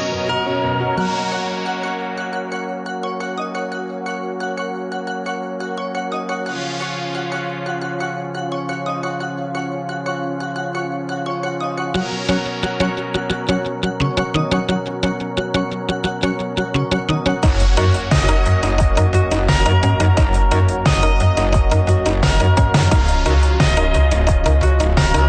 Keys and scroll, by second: 11.6 z.